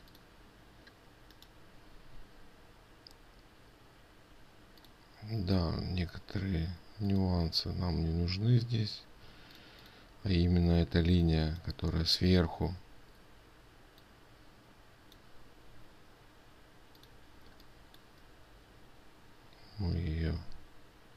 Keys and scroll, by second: 9.9 ctrl+space.